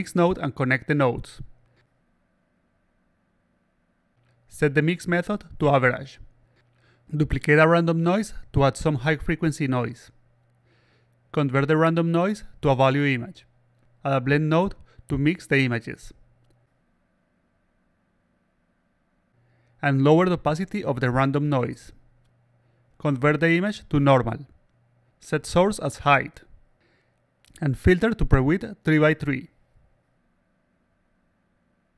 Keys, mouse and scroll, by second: 1.7 click, 3.2 click, 5.1 click, 5.7 click, 6.8-8.0 shift+drag, 8.3 click, 8.5 click, 9.5 click, 10.7 click, 11.7 click, 13.1 click, 13.8-15.4 drag, 16.8 click, 18.3 click, 20.7 click, 23.7 click, 24.4 click, 25.4 click, 26.4 click, 28.1 click, 31.3 click.